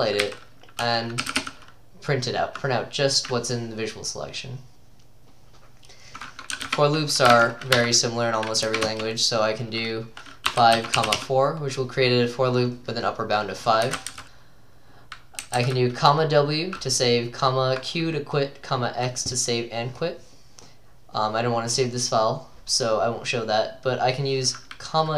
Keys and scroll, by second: 0.0-1.9 typing, 3.6-4.4 typing, 6.3-8.7 typing, 7.3 Escape, 8.9 Return, 10.3-11.9 typing, 13.7-15.1 typing, 17.0-18.5 typing, 21.5 Down, 21.6-24.5 typing.